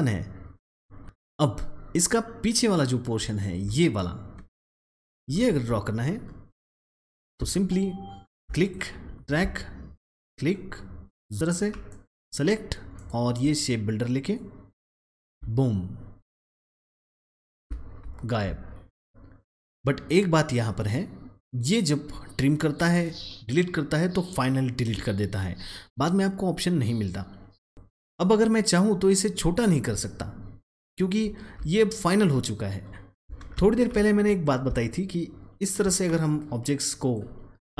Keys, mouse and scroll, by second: 3.6 click, 4.8 space, 5.7-7.1 alt+scroll up 1, 7.1-8.6 alt+drag, 9.2 alt+click, 9.3-11.8 alt+drag, 11.8 double click, 12.9 click, 14.3-16.3 alt+drag, 17.3-17.9 alt+scroll down 1, 18.1 alt+scroll up 1, 19.6 click, 27.5 click, 29.9-30.4 alt+scroll down 1, 30.4-31.1 alt+scroll up 1, 31.2-33.0 alt+scroll down 1, 33.1 alt+scroll, 33.2 alt+click, 34.3 alt+click, 36.2-37.7 drag.